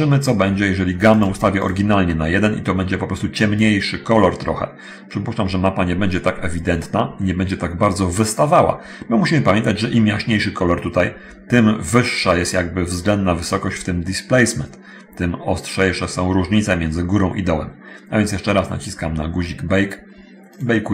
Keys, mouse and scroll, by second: 0.0 click, 1.6 click, 7.0-8.0 drag, 19.3-20.0 drag, 20.7 click.